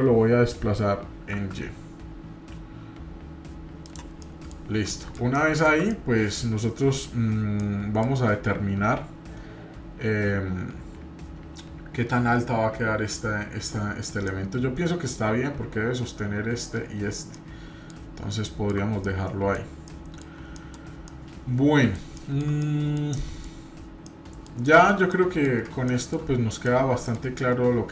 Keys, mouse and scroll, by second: 4.2-4.5 middle drag, 4.7 scroll up 1, 4.9-5.8 middle drag, 5.9-7.2 middle drag, 7.6 middle click, 14.3-15.2 middle drag, 15.3 scroll up 2, 17.0 scroll down 2, 17.3-17.9 middle drag, 18.4 shift+middle click, 19.0 middle click, 19.9-20.2 middle drag, 20.6 middle drag, 20.7-21.0 scroll down 1, 21.1-22.0 middle drag, 22.2 shift+middle click, 22.6-23.1 middle drag, 23.2 middle click, 23.7 scroll down 1, 24.1-24.9 middle drag, 25.1 middle click, 26.6 middle click.